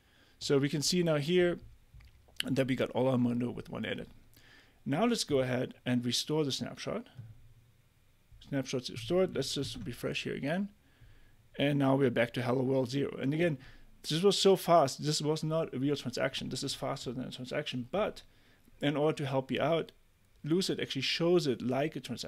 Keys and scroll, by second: 9.6 super+r.